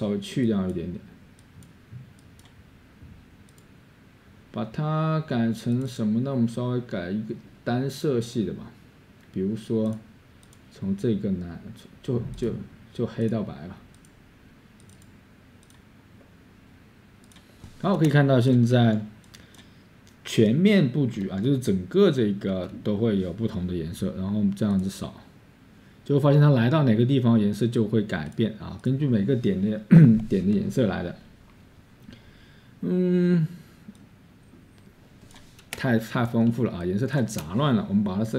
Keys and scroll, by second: 19.6-22.6 scroll, 25.6-26.9 scroll, 36.3-37.1 typing, 36.6-38.3 scroll.